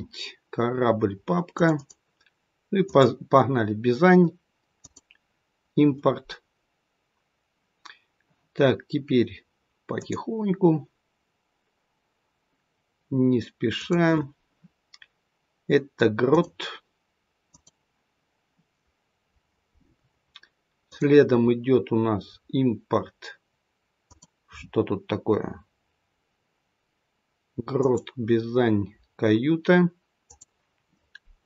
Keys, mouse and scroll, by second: 9.9 click, 20.7 click.